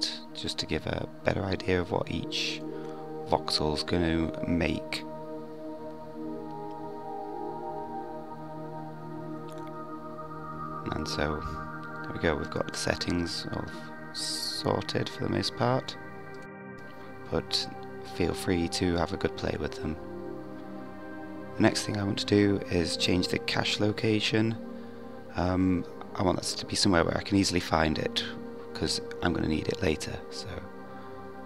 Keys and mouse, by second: 0.1-0.9 middle drag, 14.5 click, 16.3 click.